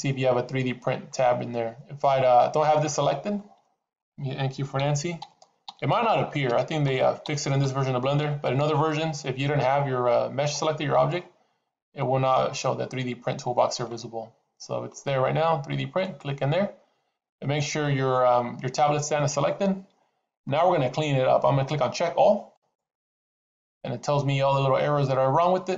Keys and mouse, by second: 2.6 click, 4.7-8.5 typing, 22.4 click.